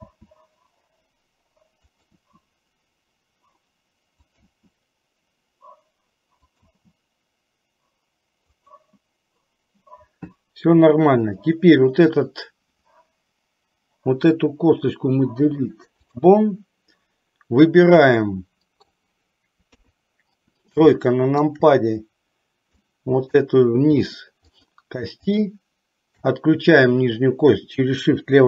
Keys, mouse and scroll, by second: 0.2 e, 2.3 e, 4.6 e, 7.2 e, 11.3 click, 15.4 Delete, 18.2 middle click, 19.9 KP_3, 21.2 shift+middle click, 22.9 click, 25.4 shift+click.